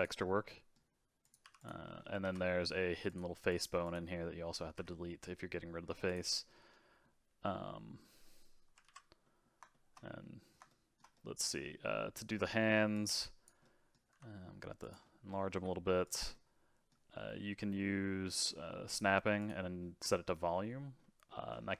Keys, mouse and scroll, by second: 0.2-1.2 middle drag, 1.2 click, 1.4 x, 1.8 middle click, 2.2 alt+z, 2.6 middle click, 3.1 click, 3.5 click, 3.8 click, 4.7 x, 6.5-8.8 middle drag, 8.8 alt+z, 9.2-12.9 middle drag, 12.9 click, 13.6 middle click, 14.1 s, 15.0 middle click, 15.5 g, 16.3-18.9 middle drag, 18.9 click, 19.4-21.0 drag, 21.0 middle click, 21.5 scroll up 2.